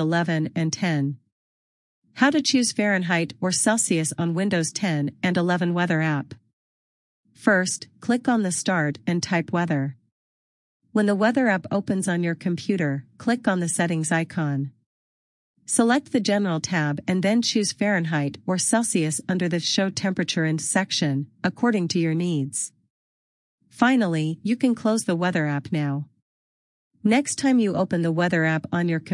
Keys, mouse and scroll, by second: 2.3 click, 6.9 click, 14.8 click, 18.5-19.0 scroll down 1, 20.1 click.